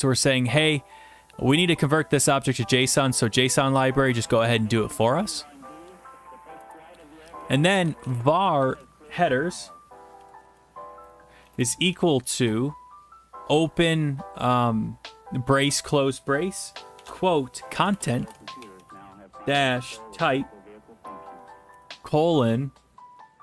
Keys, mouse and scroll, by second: 2.9 click, 3.1 click, 5.0 click, 6.6 Return, 7.7-8.8 typing, 10.2-11.9 typing, 12.4 Left, 16.9-23.4 typing.